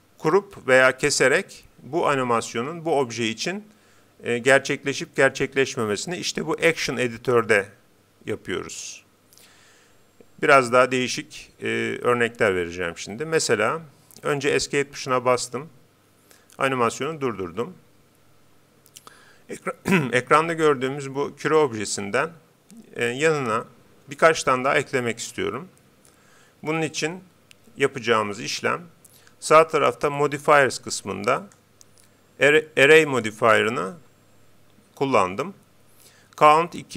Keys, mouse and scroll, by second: 14.6 Escape, 30.2-33.2 drag.